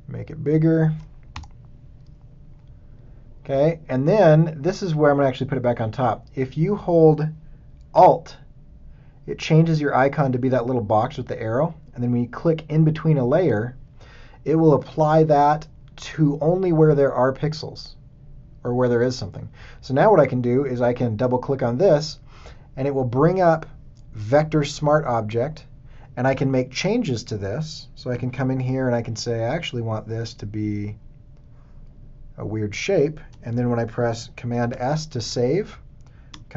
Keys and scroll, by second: 1.3 alt+shift+Return, 28.1 a, 34.6 super+s.